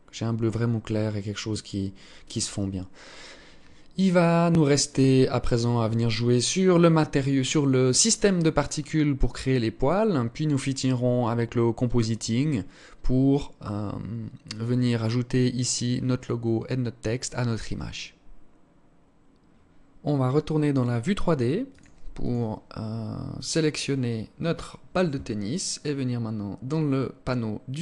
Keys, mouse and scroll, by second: 22.1 click, 23.2 right click, 25.7 scroll down 4, 27.7 click.